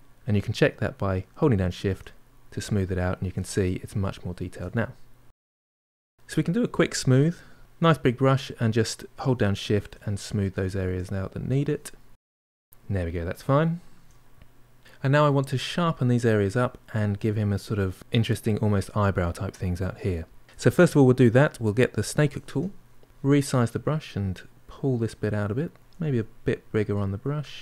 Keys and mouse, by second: 0.5-1.5 shift+drag, 1.5 middle click, 2.1-3.2 shift+drag, 3.2 middle click, 3.6 shift+click, 4.2-6.7 middle drag, 6.7 f, 7.3 middle click, 8.1-9.2 shift+drag, 9.2 middle click, 9.7 shift+click, 9.9 middle click, 10.3 shift+click, 10.8 middle click, 11.2 shift+click, 11.8 middle click, 12.2 shift+click, 12.7-14.0 middle drag, 14.0 shift+click, 14.1-16.1 middle drag, 21.9-23.1 drag, 23.1 f, 23.5 middle click, 23.9 click, 24.2 middle click, 24.5 click, 25.5 f, 25.8 click, 26.1 middle click, 26.6 click, 26.9 middle click, 27.2 click.